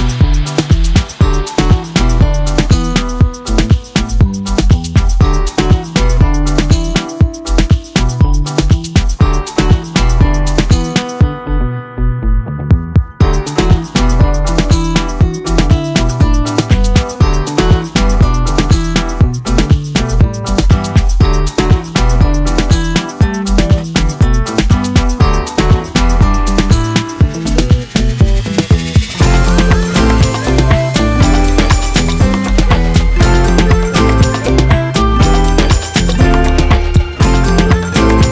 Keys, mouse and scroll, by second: 1.2-2.5 middle drag, 2.5-2.9 scroll up 10, 2.9 shift+click, 3.5 ctrl+j, 4.0 click, 5.2 shift+middle click, 6.1-9.0 drag, 8.0 t, 10.3 click, 10.6-12.0 drag, 14.7 click, 15.5 click, 15.8 x, 16.0 shift+a, 16.8 s, 17.7 ctrl+shift+click, 18.3 KP_Decimal, 19.2-20.2 drag, 20.6 shift+a, 22.4 ctrl+shift+right click, 22.8 click, 23.4 middle click, 23.8 click, 24.3 middle click, 24.7 shift+a, 26.1 click, 26.6 KP_5, 27.1 click, 27.4 KP_5, 28.6-29.6 drag, 29.9 shift+a, 31.8 click, 32.9 shift+d, 33.6 click, 34.0 middle click, 34.3 shift+a, 36.5-36.9 scroll down 8, 36.7 middle click, 37.0 click, 37.4 shift+a.